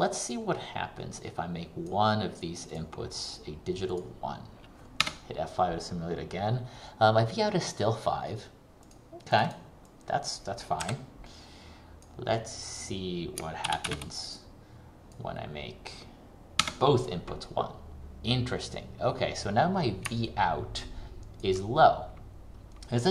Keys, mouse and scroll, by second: 5.2 F5, 9.0 click, 13.8 ctrl+c, 14.0 ctrl+v, 14.4 click, 16.8 F5, 20.4 ctrl+click.